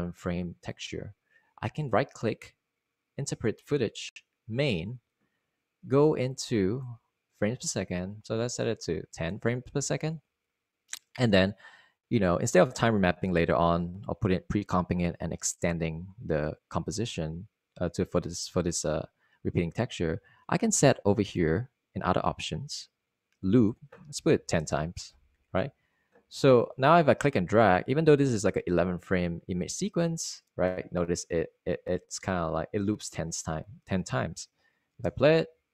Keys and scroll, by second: 11.2 0, 26.2 0, 26.7 Return, 35.6 super+z.